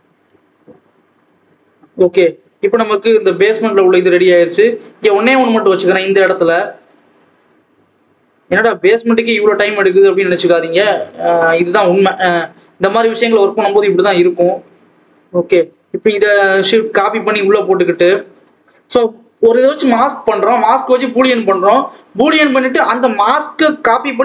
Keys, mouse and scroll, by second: 0.0-0.5 scroll down 1, 0.5 ctrl+s, 0.8 click, 4.5-5.0 scroll up 1, 5.0-7.3 scroll down 1, 7.3 click, 8.3-9.3 drag, 10.1 click, 10.5-11.7 scroll up 1, 11.7-12.1 scroll down 2, 12.1 shift+d, 13.6 click, 14.6-17.9 scroll up 1, 19.2-22.7 drag, 22.7 alt+a, 23.2 l.